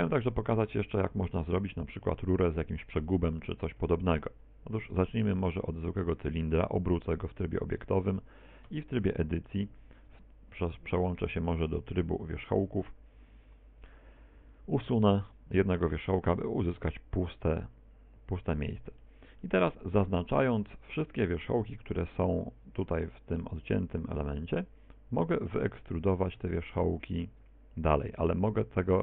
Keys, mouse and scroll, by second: 0.0 x, 1.1 KP_1, 3.9 shift+a, 6.4 r, 7.9 ctrl+click, 8.7 Tab, 9.0 middle click, 10.0 ctrl+Tab, 12.2 click, 13.8 right click, 14.4 x, 15.3-15.9 scroll up 5, 15.9 shift+middle click, 16.3 middle click, 19.4 middle click, 22.1 b.